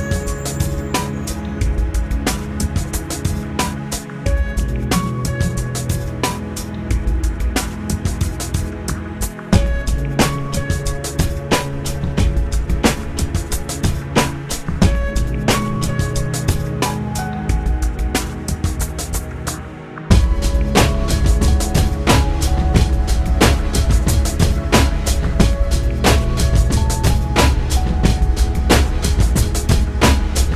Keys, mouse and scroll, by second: 3.9 click, 5.7 Delete, 7.1 Return, 12.6 click, 14.0 click, 15.3 click, 16.7 middle click, 16.9 click, 22.8 click, 26.0 click, 29.8-30.5 shift+drag.